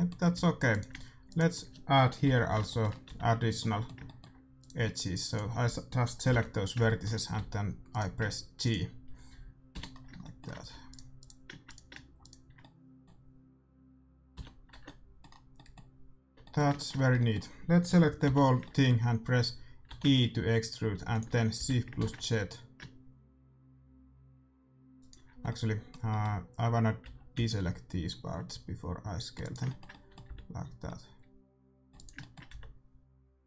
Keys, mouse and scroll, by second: 0.3 a, 0.6-2.8 right drag, 2.2 j, 2.6 middle click, 3.0 a, 4.5-6.9 right drag, 6.4 j, 6.8 middle click, 7.3 a, 7.8-9.4 middle drag, 7.8-10.3 right drag, 9.8 j, 10.1 middle click, 10.6 a, 10.8-14.3 middle drag, 10.8-13.9 right drag, 14.3 j, 14.7 Tab, 14.8 middle click, 16.1 Tab, 17.0 a, 18.2 l, 19.8 e, 21.6 s, 25.4 middle click, 26.9 z, 27.3 c, 30.2 c, 31.6 middle click, 32.0-33.4 right drag, 32.1-33.4 middle drag, 32.4 c.